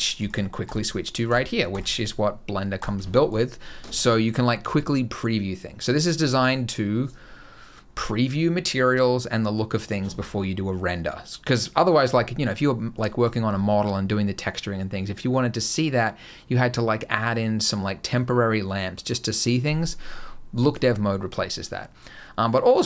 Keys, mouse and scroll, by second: 20.5 click.